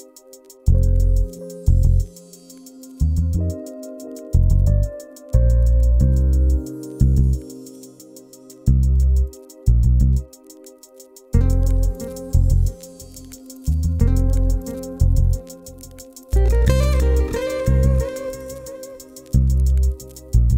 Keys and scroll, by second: 7.2 t, 10.5 e.